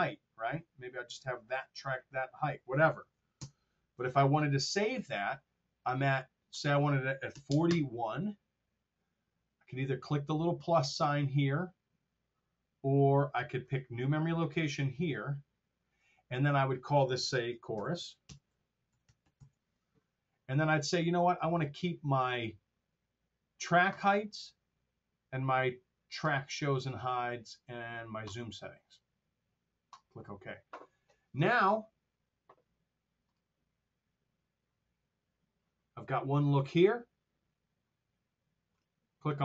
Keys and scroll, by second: 3.3 ctrl+alt+super+Down, 7.2 KP_4, 7.4 KP_0, 7.5 Return, 17.7-19.8 typing.